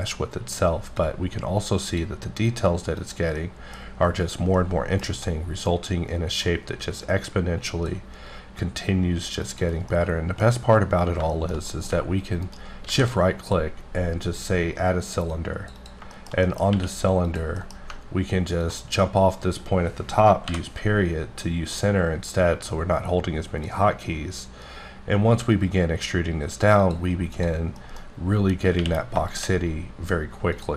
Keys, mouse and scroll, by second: 1.0 click, 3.0 click, 3.4 middle click, 3.8 scroll up 1, 4.5 middle click, 5.3 middle click, 6.4-8.0 drag, 9.4 click, 9.9 middle click, 10.5-10.8 scroll up 1, 11.0-11.3 scroll down 2, 11.3 shift+middle click, 12.9 shift+a, 15.3 click, 15.8 double click, 16.2 middle click, 16.5 double middle click, 16.7 q, 17.3 click, 17.6 middle click, 17.8-18.6 scroll down 2, 18.6-20.3 ctrl+drag, 25.4 e, 26.8 click, 27.3 click, 27.8 middle click, 28.8 q, 29.3 shift+click, 29.9-30.3 scroll down 2, 30.5 click.